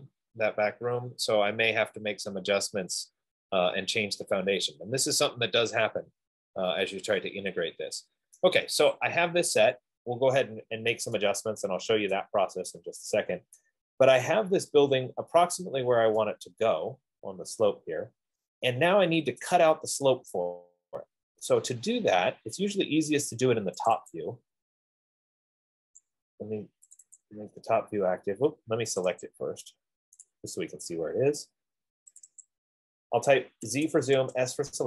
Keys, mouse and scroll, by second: 2.3-3.4 middle drag, 8.5 right click, 9.5 middle click, 10.0 Escape, 10.8 middle click, 11.0 middle click, 12.1 scroll, 12.4 right click, 14.0 right click, 15.8 scroll, 19.7 right click, 24.2 click, 24.6 click, 26.5 click, 27.3 click, 27.5 click, 29.4 click, 29.6 click, 30.5 click, 32.5 click, 32.8 click, 34.0-34.8 typing.